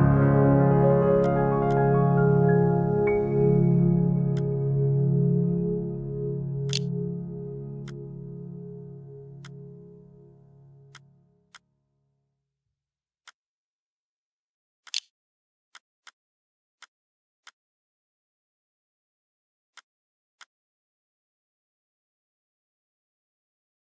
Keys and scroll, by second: 5.8 q, 6.3 b, 14.0-15.2 typing.